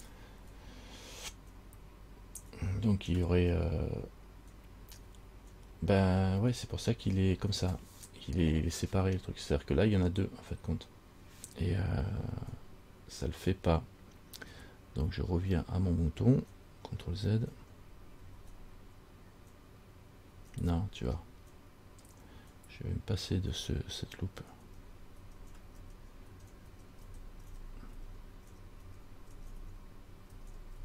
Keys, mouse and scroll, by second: 5.9-7.6 scroll up 4, 7.6-9.6 scroll up 1, 17.8 ctrl+z, 18.5 ctrl+z, 20.6 ctrl+z, 21.7-23.8 scroll up 9, 24.9 ctrl+z, 25.4 ctrl+z, 26.0 ctrl+z, 26.6 ctrl+z, 26.9 ctrl+z, 27.3 ctrl+z, 27.7 ctrl+z, 28.2 ctrl+z, 28.7 ctrl+z, 29.1 ctrl+z, 29.6 ctrl+z, 29.8 ctrl+z, 30.6 ctrl+z.